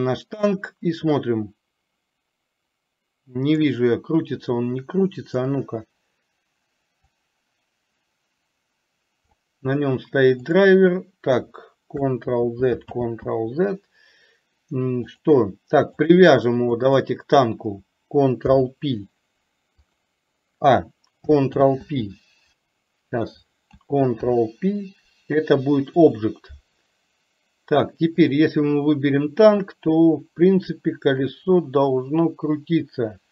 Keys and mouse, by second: 1.5-3.8 drag, 5.5 click, 7.4-9.4 drag, 10.6 click, 12.4 ctrl+z, 13.1 ctrl+z, 15.3 click, 16.8 shift+click, 18.5 ctrl+p, 21.6 ctrl+z, 24.3 ctrl+p, 28.3 click, 29.6-33.3 drag.